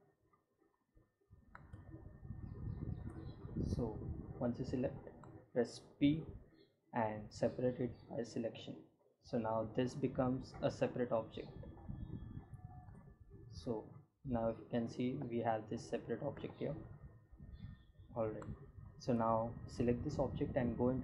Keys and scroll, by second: 4.3 p, 8.9 g, 11.2 Tab, 13.2 g, 20.1 Tab.